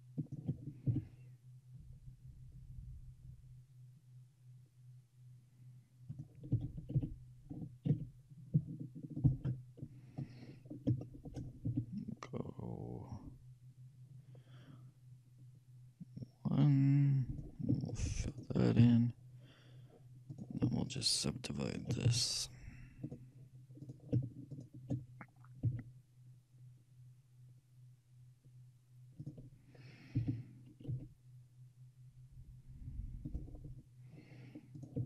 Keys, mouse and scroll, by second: 1.0 e, 6.6 g, 10.5-13.0 middle drag, 11.8 e, 18.4-20.3 shift+right drag, 19.0 f, 20.4-23.5 right drag, 22.2 w, 24.1-26.5 shift+right drag, 25.7 s, 30.2 g, 34.9-35.0 shift+right drag.